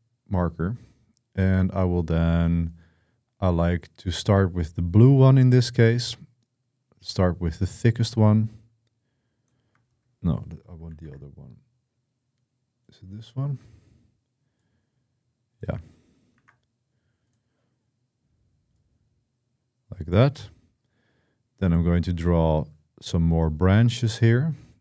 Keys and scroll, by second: 10.7 ctrl+z, 16.1 ctrl+z.